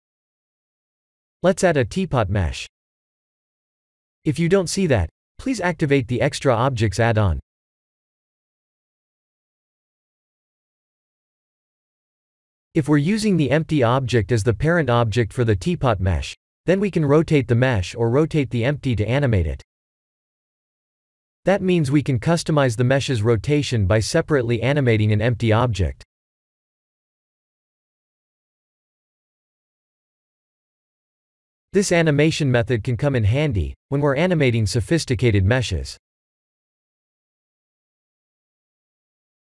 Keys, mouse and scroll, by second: 0.8 shift+a, 13.0 ctrl+3, 13.5 s, 15.3 click, 17.7 click, 18.9 click, 24.5 click, 26.6-27.7 middle drag, 30.0-30.6 middle drag, 36.1 click, 37.4 click.